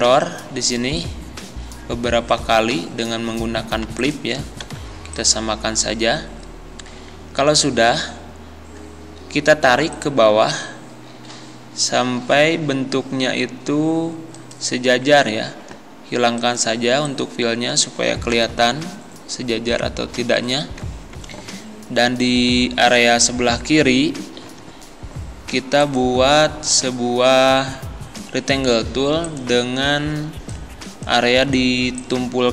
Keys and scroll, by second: 4.6 c, 18.4 Left, 24.5 d.